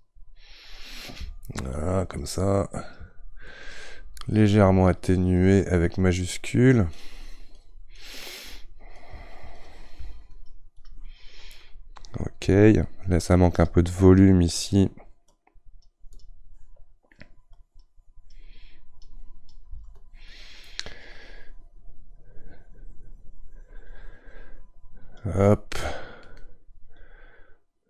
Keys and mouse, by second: 15.3-16.9 right drag, 16.9-27.1 drag, 27.1-27.8 right drag.